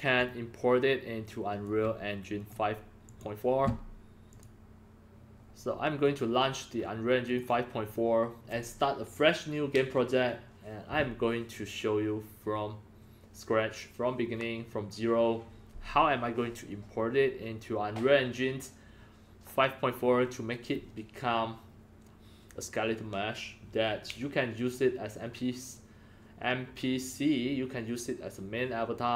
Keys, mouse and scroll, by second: 0.1-1.6 alt+drag, 2.3 click, 3.0 click, 4.3 click, 6.0 click, 7.2 click.